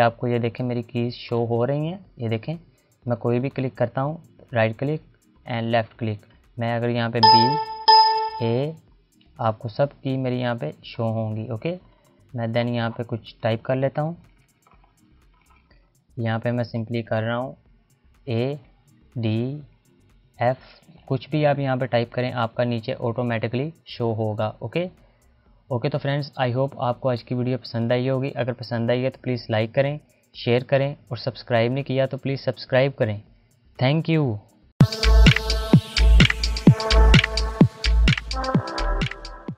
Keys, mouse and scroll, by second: 0.9 click, 3.0 right click, 3.6 click, 4.1 right click, 5.0 click, 6.8-7.4 typing, 10.5 click, 11.9-12.8 scroll down 1, 12.8 click, 13.4 Return, 16.8-20.7 typing, 24.0 click.